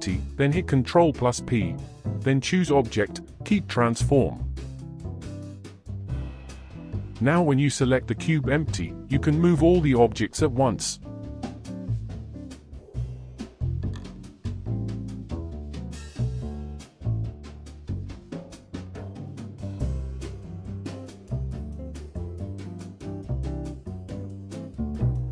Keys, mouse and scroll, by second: 0.6 shift+click, 2.2 shift+click, 3.8 ctrl+p, 6.5 click, 7.1 click, 7.9 r, 11.4 ctrl+z, 11.8-12.1 scroll down 4, 12.6 ctrl+s, 13.3 space, 14.0 space, 15.2-16.4 drag, 16.4 space, 19.1 space, 20.4-21.5 drag, 21.5 space, 23.5 space, 24.2 click, 24.7-25.3 drag.